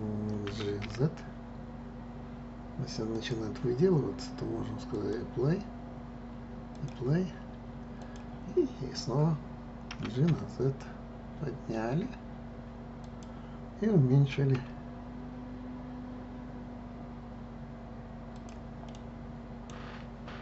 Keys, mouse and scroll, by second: 0.5 g, 4.9 click, 6.6 click, 8.0 click, 9.9 g, 14.5 s, 18.8-20.4 middle drag.